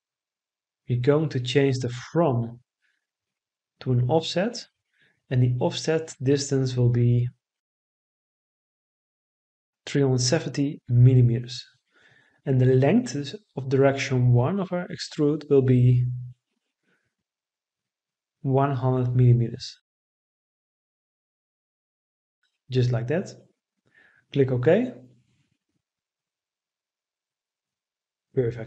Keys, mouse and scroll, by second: 9.6 3, 10.2 7, 10.9 0, 12.0 Return, 18.9 1, 19.3 0, 21.6 Return.